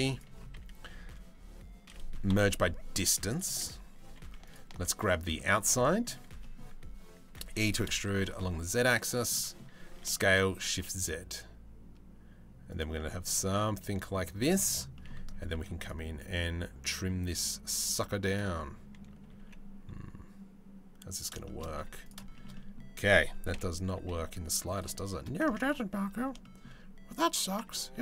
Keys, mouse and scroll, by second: 0.1 a, 1.9 m, 3.6 2, 4.9 middle click, 6.0 middle click, 8.9 middle click, 9.5 s, 12.5-13.7 middle drag, 14.0 shift+middle click, 14.5 middle click, 15.1 ctrl+r, 18.8 g, 21.0 shift+middle click, 21.4 3, 21.9 middle click, 22.1 middle click, 23.1 KP_7, 23.5 z, 25.1 Tab, 26.0 shift+middle click, 27.2 Tab, 27.7 a.